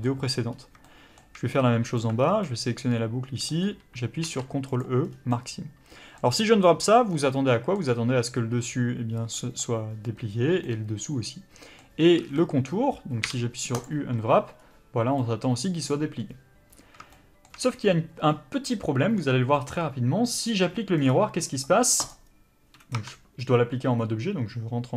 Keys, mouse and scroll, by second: 0.3-0.8 scroll up 1, 0.8 shift+middle click, 1.9 alt+click, 2.2 scroll down 1, 2.4 middle click, 3.6-4.8 scroll up 1, 4.8 ctrl+e, 5.0 scroll down 1, 5.3 middle click, 12.2 a, 12.4 middle click, 13.8 u, 17.1 shift+middle click, 23.0 Tab.